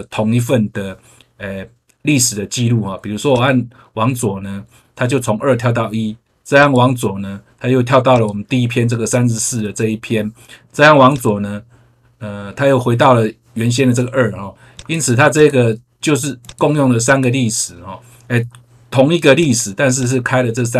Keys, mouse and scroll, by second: 3.2 click, 6.5 click, 8.0 click, 11.0 click, 14.7 click, 15.3 click, 16.4 click, 17.0 click, 19.3 click, 19.9 click.